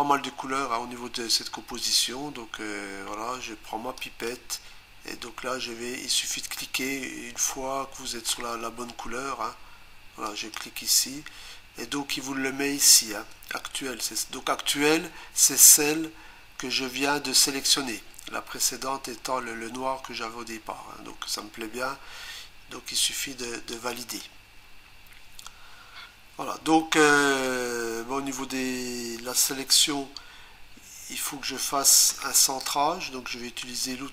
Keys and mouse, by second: 4.0 click, 10.3 click, 23.9 click.